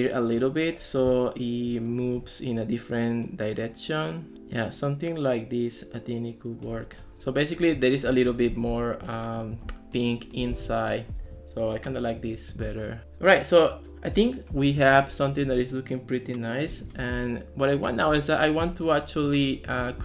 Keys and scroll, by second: 8.7 Escape, 9.7 ctrl+s, 10.6 ctrl+x.